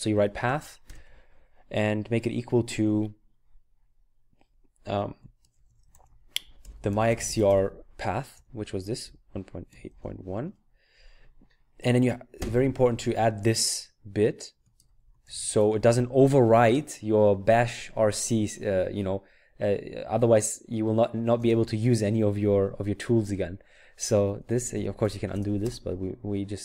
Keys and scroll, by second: 0.0-1.4 typing, 5.4-10.5 typing, 12.3 typing, 14.7-15.3 typing, 21.4 Return, 24.3-25.8 typing.